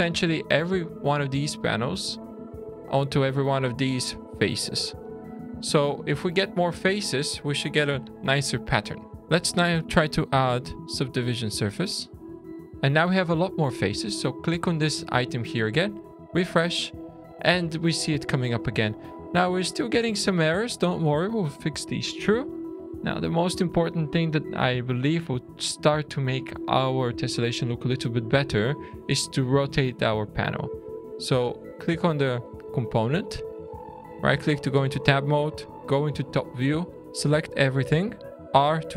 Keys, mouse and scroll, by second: 0.4 click, 4.8 click, 6.3 click, 12.6 shift+middle click, 12.6-13.0 scroll down 3, 14.2 click, 15.9 click, 16.7 scroll up 3, 17.2 scroll down 3, 17.7 shift+middle click, 19.4-19.9 scroll up 4, 20.1-20.9 scroll down 2, 21.3 middle click, 21.8-22.1 scroll down 2, 22.3 shift+middle click, 23.1 middle click, 24.5 shift+scroll up 1, 24.6 shift+middle click, 27.1 shift+scroll down 1, 27.9 click, 29.8-31.1 scroll up 4, 34.1 Tab, 35.7 `, 36.9 a, 38.5 r.